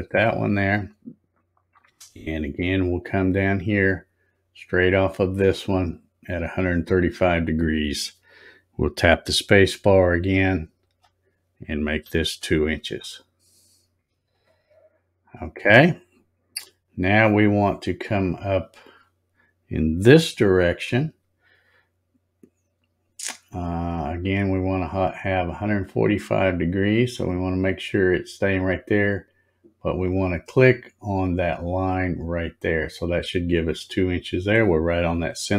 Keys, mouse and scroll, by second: 10.8 space, 31.7 click.